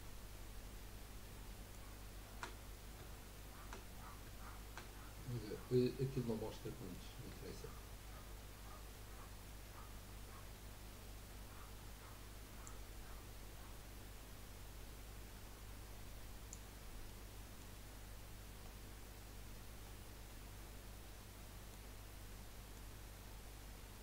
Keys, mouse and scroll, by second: 5.4-6.0 middle drag, 6.0 scroll down 1, 6.6-9.7 middle drag, 12.7-15.7 drag, 17.0-18.0 middle drag, 18.0-19.0 scroll up 2, 19.0-19.8 scroll down 4, 19.8-20.2 scroll down 4, 20.4-24.0 middle drag.